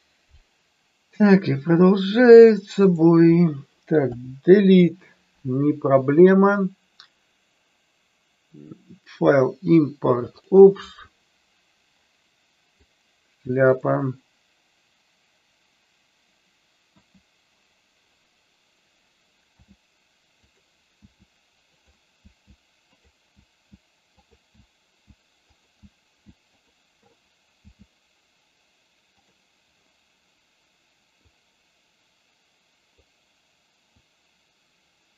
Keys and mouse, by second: 1.2-2.0 middle drag, 4.0 Delete, 6.1-10.6 drag, 16.7 KP_1, 19.5 s, 21.0 s, 22.1 s, 23.3 s, 24.4 s, 25.4 click, 25.8 s, 26.5 click, 27.5 s, 31.2-32.9 drag, 34.0-35.1 drag.